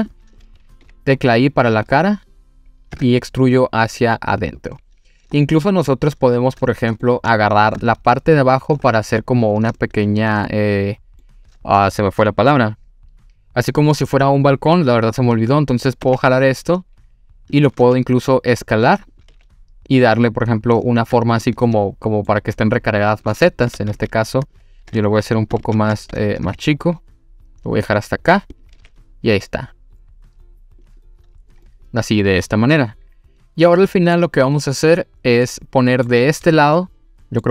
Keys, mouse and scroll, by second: 0.8 i, 1.9 click, 2.9 e, 4.4 click, 4.9-5.4 scroll down 2, 5.4-7.0 middle drag, 7.4-7.7 shift+middle drag, 8.4 click, 8.8 scroll up 2, 9.7 scroll up 1, 9.8-10.3 shift+middle drag, 10.5-11.2 middle drag, 16.1 e, 17.5 click, 17.8 s, 19.1 click, 19.3 e, 20.9 click, 21.1-21.6 scroll down 2, 21.4 middle click, 23.4-23.7 middle drag, 23.8 ctrl+z, 24.0 ctrl+z, 26.5 e, 27.9 click, 28.5 click, 28.8 e, 30.8 click, 31.7-34.2 middle drag, 34.5-34.9 scroll down 3, 35.5 middle click, 35.5 scroll down 2, 36.8 middle click.